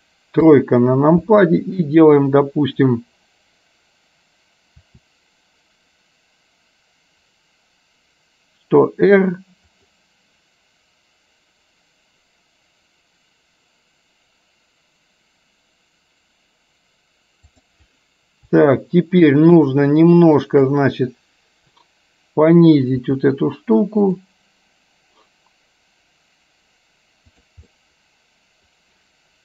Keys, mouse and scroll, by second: 0.5 KP_3, 4.9 r, 20.5 shift+click, 23.1 r, 27.5 click, 27.9-29.4 middle drag.